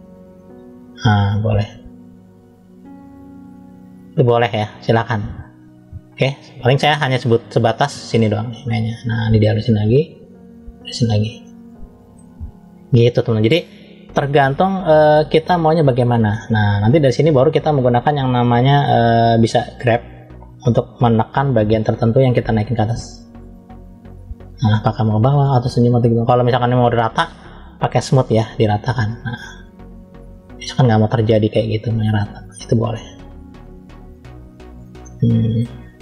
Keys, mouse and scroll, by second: 1.4 click, 5.3 ctrl+z, 7.4 click, 8.2 click, 11.3 middle click, 12.6-13.3 scroll up 1, 13.7 click, 19.6 click, 21.1 f, 22.8 click, 27.7 click, 28.4 click, 32.6 click, 34.3-34.9 scroll down 3, 34.9 middle click, 35.8 scroll up 2.